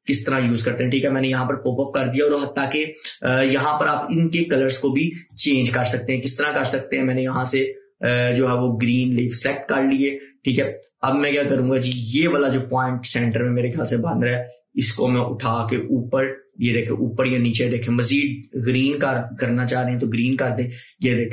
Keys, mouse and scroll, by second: 7.6 click, 13.4-21.3 drag.